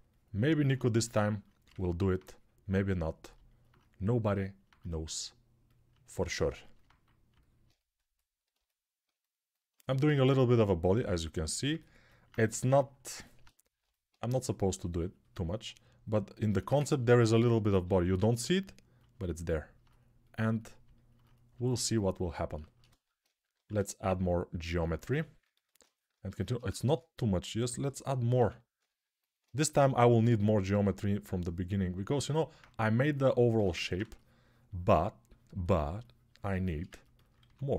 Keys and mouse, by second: 12.2 1, 17.6 g, 23.4 shift+r, 25.0 ctrl+r, 26.6 shift+r, 28.6 shift+r, 32.2-37.7 alt+shift+drag, 37.2 2.